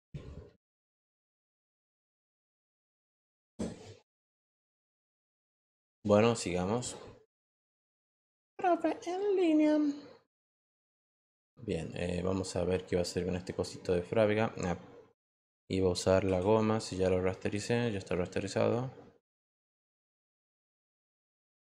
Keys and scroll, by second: 16.3 e.